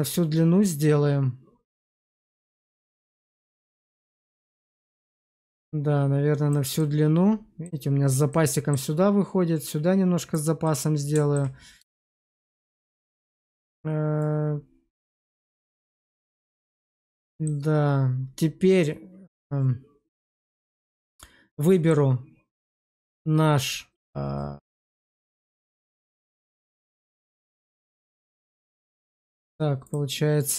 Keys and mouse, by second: 6.7 middle click, 8.2 middle click, 10.6 middle click, 11.8 shift+middle click, 14.1 click, 17.2 shift+middle drag, 20.7 click, 21.5 middle drag, 25.3 middle click, 26.1 q, 29.7-30.5 drag.